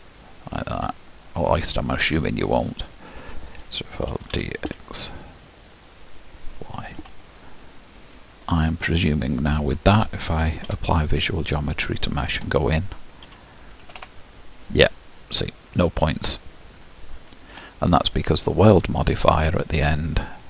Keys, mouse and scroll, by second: 1.6-2.4 scroll down 1, 2.4-3.3 scroll down 3, 3.3-4.3 scroll down 1, 4.3 shift+d, 8.7 click, 9.3-10.7 scroll up 3, 11.6 ctrl+a, 12.5 Tab, 13.3 a, 17.6 Tab, 18.8-19.5 scroll up 1, 19.5-19.8 scroll up 1, 19.8-20.4 drag.